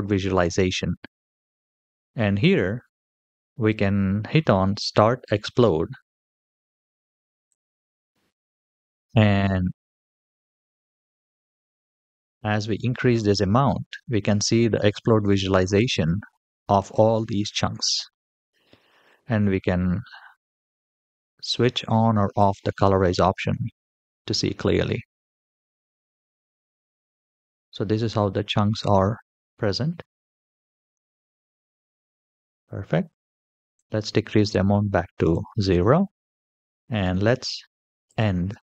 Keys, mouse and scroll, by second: 7.2 click, 9.0 middle click, 11.2-15.5 drag, 16.1-18.1 middle drag, 22.2 click, 23.2-24.4 middle drag, 24.7-25.3 scroll up 3, 25.5-30.8 middle drag, 31.1-32.3 scroll down 6, 33.5-35.2 drag, 37.8 click.